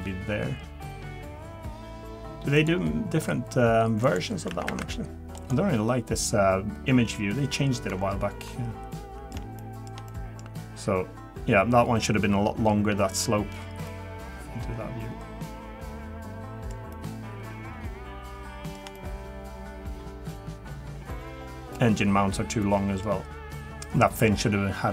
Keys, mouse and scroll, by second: 12.4 shift+middle click, 13.9 middle click.